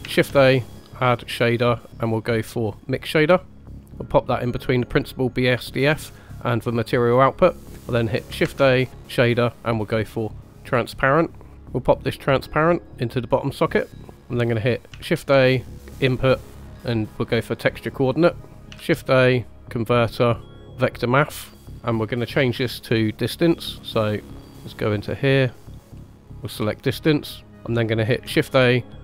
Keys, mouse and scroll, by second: 0.0 shift+a, 8.3 shift+a, 12.7-13.7 drag, 14.3-14.7 middle drag, 14.9 shift+a, 18.7 shift+a, 22.6 scroll up 2, 23.3 scroll up 1, 23.9-26.2 drag, 26.7 middle click, 28.2 shift+a.